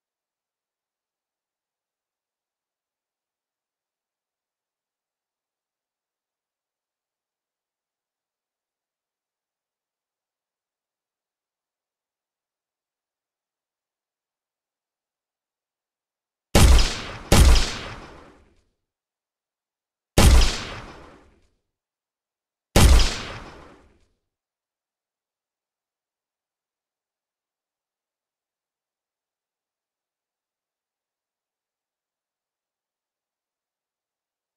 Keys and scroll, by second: 11.6 w, 18.0 d, 22.1 w, 25.2 Escape.